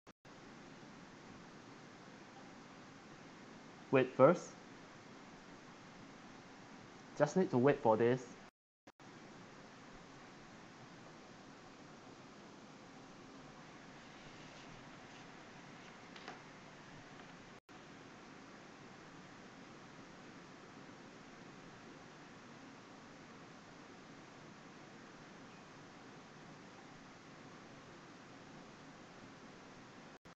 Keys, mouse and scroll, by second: 1.0 Escape.